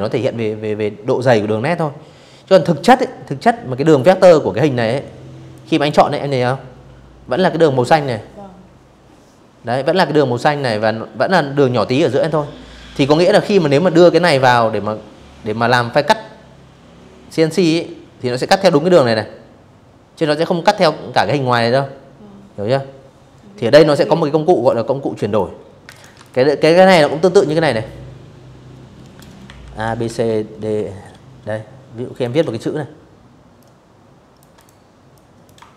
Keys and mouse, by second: 3.2 click, 22.2 click, 22.8 click, 23.5 click, 23.5 space, 23.8 v, 23.9 click, 24.6 t, 25.0 click, 26.9-28.7 typing, 29.7 click, 31.2 shift+click, 32.2 click, 32.8 click, 34.1 shift+click, 34.7 click, 35.3 click.